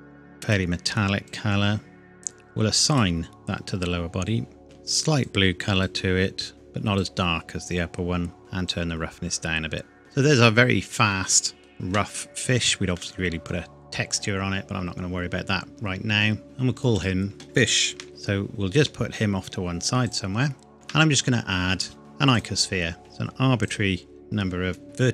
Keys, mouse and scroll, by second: 1.7-2.1 scroll up 1, 2.9 click, 3.9 scroll up 1, 4.1-4.5 scroll down 1, 4.6 click, 8.7 click, 10.0 middle click, 12.2 scroll down 1, 12.9 middle click, 15.0-15.5 scroll down 1, 16.4 click, 17.8 shift+f, 18.7-20.1 scroll down 1, 20.1 click, 20.7 shift+a, 22.3 click, 23.0 s, 23.6 click, 24.2-25.1 scroll down 1.